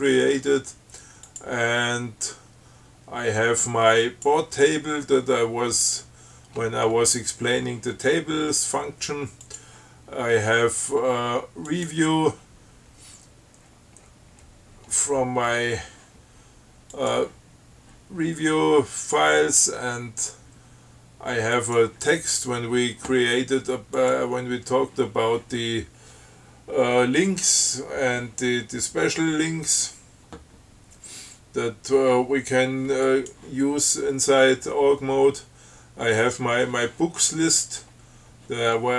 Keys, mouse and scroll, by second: 1.5 click, 4.3 click, 5.5-6.2 scroll down 4, 6.4-6.7 scroll up 2, 6.7-7.4 scroll down 4, 7.4-8.1 scroll up 2, 9.7 click, 11.9 click, 13.8-14.9 scroll down 8, 15.1-16.0 scroll up 4, 17.2 click, 21.8 click, 24.2 click, 33.3 click, 36.4 click.